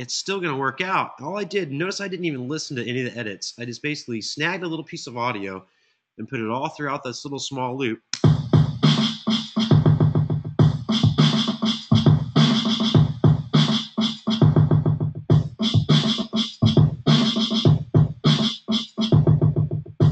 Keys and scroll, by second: 7.8 space.